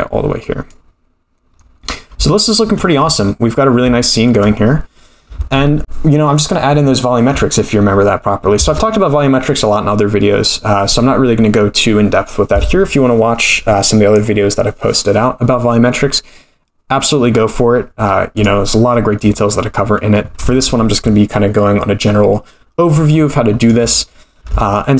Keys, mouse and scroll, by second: 1.5-2.1 scroll down 7, 2.3-2.7 shift+middle drag, 4.0-4.4 shift+middle drag, 17.7-18.5 scroll down 6, 18.3 click, 18.9 middle click, 23.6 click, 24.6 shift+middle drag.